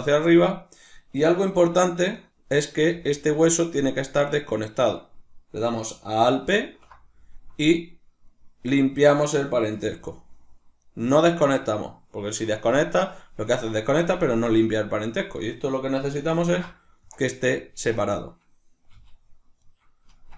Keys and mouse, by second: 1.7 g, 2.7 right click, 2.9 g, 4.1 right click, 6.6 alt+p, 9.8 g, 10.9 right click, 15.5-17.7 middle drag, 16.5 ctrl+alt+s, 17.7 click, 18.0 right click, 18.9 g, 19.7 right click, 20.1 Tab.